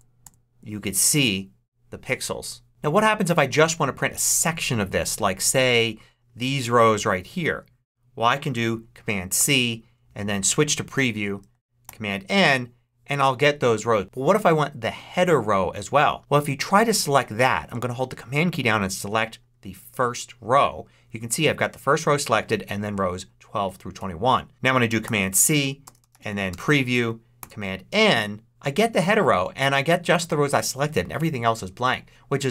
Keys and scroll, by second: 9.3 super+c, 10.8 Return, 11.4 super+Return, 11.7 super+n, 24.9 super+c, 25.9 super+p, 26.0 r, 26.4 Return, 27.0 super+Return, 27.3 super+n.